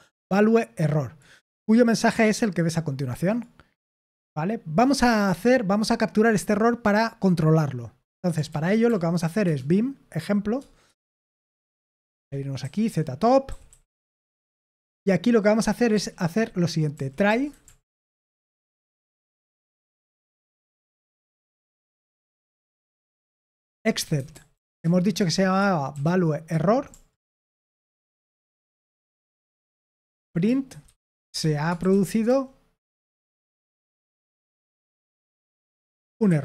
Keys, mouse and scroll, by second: 4.2-8.4 drag, 8.4 ctrl+p, 8.8 ctrl+p, 9.4 Return, 11.9-14.7 typing, 17.1-26.9 typing, 18.4 Escape, 20.2 Tab, 22.8 Tab, 28.7 Return, 29.4-36.4 typing.